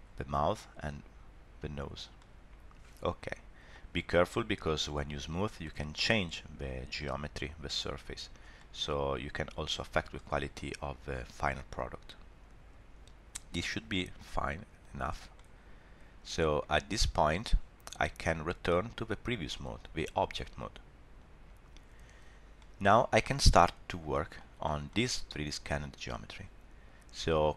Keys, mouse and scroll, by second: 0.5 click, 2.2 middle click, 4.3 middle click, 5.7 middle click, 8.2 scroll up 1, 8.5 middle click, 9.0 scroll down 1, 11.1 shift+middle click, 11.5 middle click, 14.2 click, 14.8 click, 15.3 middle click, 16.8 scroll down 1, 19.4 click, 22.6 middle click, 24.1 middle click, 24.6 shift+middle click, 24.9 middle click.